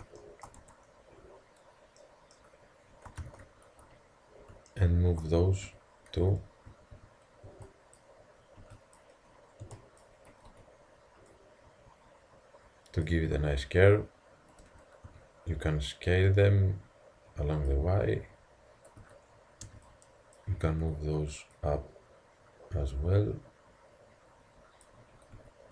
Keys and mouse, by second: 0.6 Tab, 3.2 ctrl+KP_3, 5.7-7.5 typing, 8.6 b, 9.7 b, 10.5 z, 11.3-13.2 drag, 14.6 s, 18.3 a, 19.0 z, 19.6 b, 20.8 z, 21.6-23.4 drag, 25.4-25.7 typing.